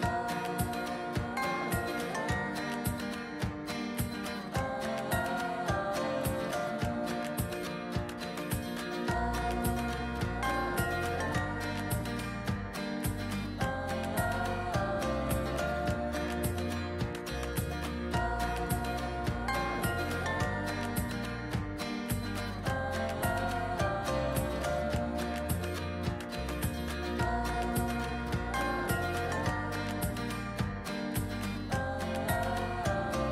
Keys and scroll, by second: 4.8 ctrl+j, 5.6 ctrl+j, 6.8 ctrl+j.